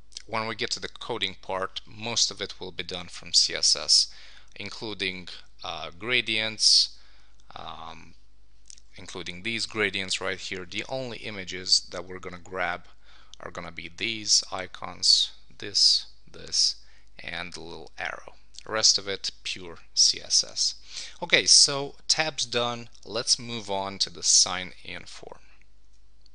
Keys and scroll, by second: 25.8 Tab.